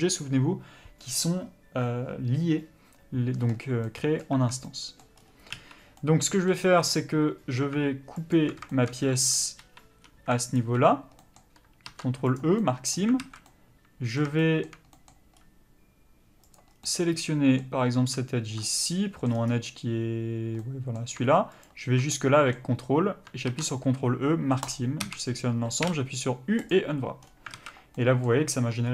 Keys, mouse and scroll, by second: 3.5-3.9 scroll up 1, 3.9 middle click, 4.4 Tab, 4.6 middle click, 5.1-6.0 scroll up 1, 6.0 middle click, 8.3 alt+click, 8.7 shift+middle click, 9.1 1, 9.6 3, 10.0 2, 10.5 alt+click, 11.2 middle click, 12.4 ctrl+e, 12.6 middle click, 13.2 alt+a, 13.5 middle click, 15.3-16.4 scroll up 1, 16.4 click, 16.7 scroll down 1, 16.8 middle click, 18.6 scroll up 1, 18.8 middle click, 19.3-20.6 scroll down 1, 20.6 middle click, 21.7 ctrl+click, 22.1 middle click, 22.8-24.8 scroll up 1, 24.8 ctrl+e, 25.0 a, 26.7 u, 27.5 alt+a.